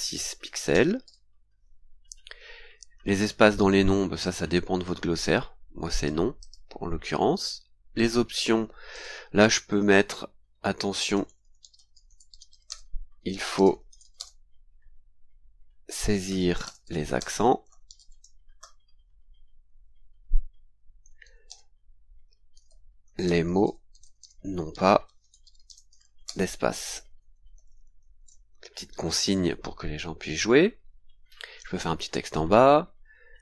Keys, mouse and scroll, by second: 0.4 KP_8, 0.7 KP_0, 1.0 KP_6, 1.9-2.3 scroll down 2, 4.2 click, 5.9 click, 6.4 click, 7.0-7.3 scroll down 2, 8.0 click, 8.9 click, 10.6-14.5 typing, 15.7-18.5 typing, 21.2-28.2 typing, 30.5-31.3 scroll down 4, 32.4 scroll down 2.